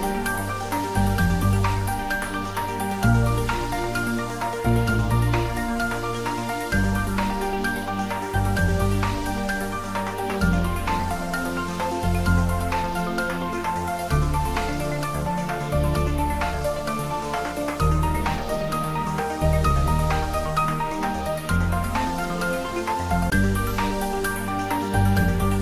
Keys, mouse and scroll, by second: 0.9 Left, 5.8 click, 8.0 r, 8.6 Down, 12.4 Left, 14.2 click, 16.2 shift+z, 19.8-21.1 drag, 21.1 ctrl+z, 22.2 z, 23.6 click, 24.5 shift+z.